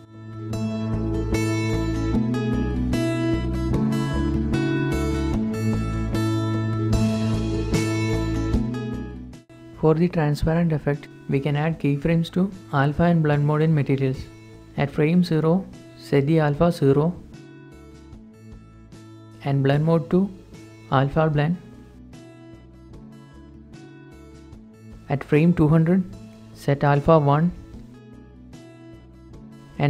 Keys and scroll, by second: 0.7 shift+space, 2.3 shift+0, 5.2-9.5 typing, 5.5 Return, 6.0 Return, 6.0 Tab, 10.6 shift+space, 12.5 shift+space, 17.1 0, 17.3 Return, 24.1-25.0 typing, 25.0 Return, 26.6-27.3 typing.